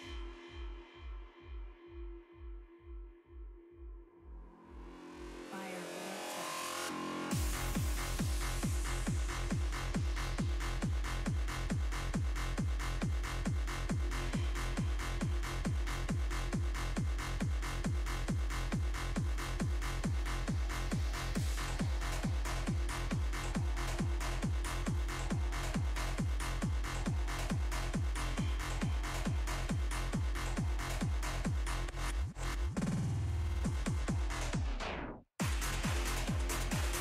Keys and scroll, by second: 21.2 z.